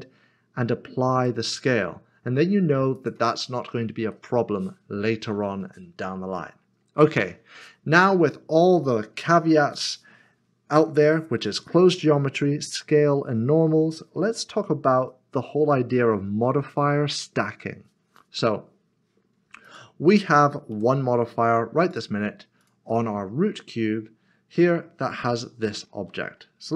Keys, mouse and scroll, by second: 1.1 click, 4.1 middle click, 19.6 middle click, 20.7 g, 21.9 click.